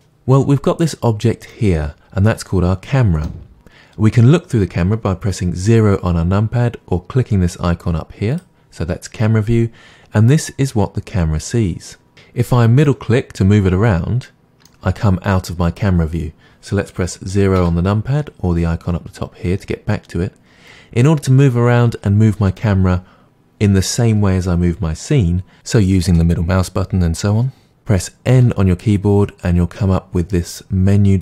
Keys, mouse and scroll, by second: 0.9 click, 1.5-8.3 middle drag, 8.3 click, 12.8-17.1 middle drag, 17.5 KP_0, 17.9-31.2 middle drag, 28.3 n.